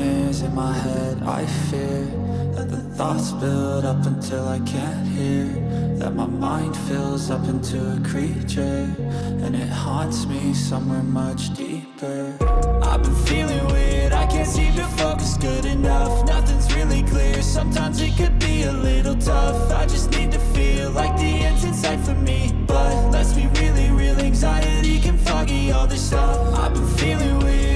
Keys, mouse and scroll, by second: 14.6 ctrl+space, 15.6 ctrl+click, 15.8 ctrl+space, 16.1 ctrl+click, 16.3 ctrl+space, 17.1 ctrl+click, 17.2 ctrl+space, 18.2 right click.